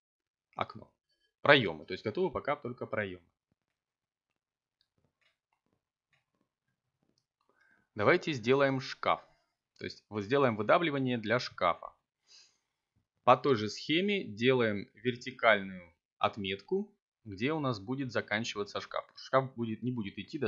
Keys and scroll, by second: 3.3 k, 7.1 Return, 8.3 s, 9.8 y, 10.3 0, 11.6 Return, 14.5 7.